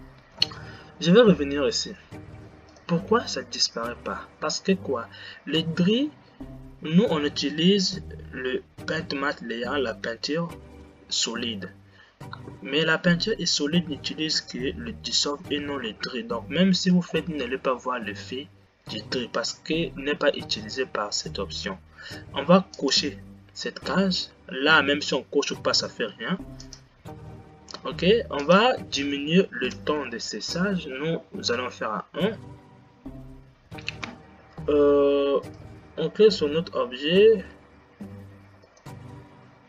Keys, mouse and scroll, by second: 0.7 Left, 3.6 click, 5.9-7.3 scroll down 9, 23.1 click, 27.1-32.1 drag, 39.1 click.